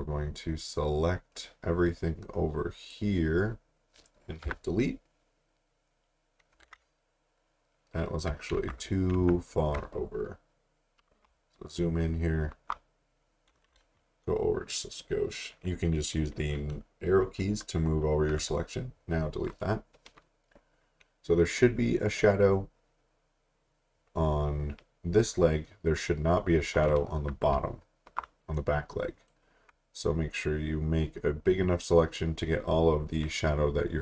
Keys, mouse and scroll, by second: 1.3 click, 4.4 Delete, 6.6 ctrl+d, 8.5 ctrl+z, 9.1 ctrl+z, 11.4 alt+scroll up 1, 12.8-13.2 scroll up 1, 13.7 right click, 18.5 Delete, 19.5 click, 27.5 alt+Num_Lock, 27.6 alt+scroll down 1, 28.5 click, 32.1 click.